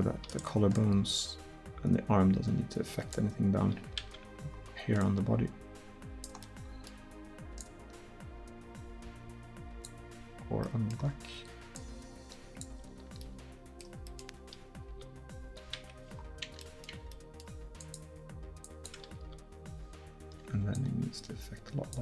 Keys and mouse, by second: 0.8-3.2 middle drag, 3.5 click, 4.1 ctrl+z, 11.8-13.9 middle drag, 14.9 r, 16.2 middle click, 17.8-22.0 drag, 19.2 r.